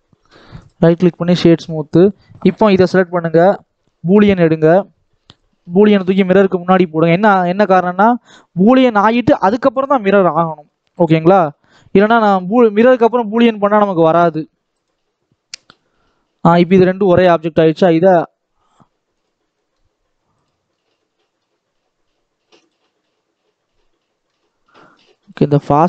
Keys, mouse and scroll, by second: 0.5 right click, 1.3 shift+middle click, 1.9 click, 4.2-6.2 drag, 7.1-11.4 drag, 12.0 click, 16.0-17.8 middle drag, 17.8-19.2 drag, 19.5 middle click, 20.3 click, 20.6 scroll up 3, 20.9 middle click, 22.5 click, 22.9-24.3 middle drag, 24.3-24.8 scroll up 2, 24.8-25.8 middle drag.